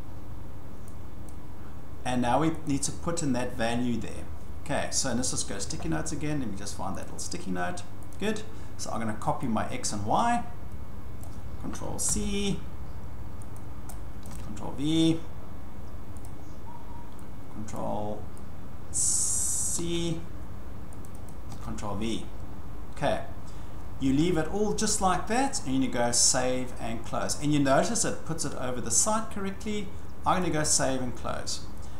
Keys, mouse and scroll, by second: 1.3 click, 2.7 click, 7.0 click, 8.2 click, 11.2 click, 12.1 ctrl+c, 13.6 click, 14.2 click, 14.3 ctrl+v, 16.2 click, 17.7 click, 19.2 click, 19.8 ctrl+c, 21.0 click, 21.3 click, 21.5 ctrl+v, 30.4-31.6 drag.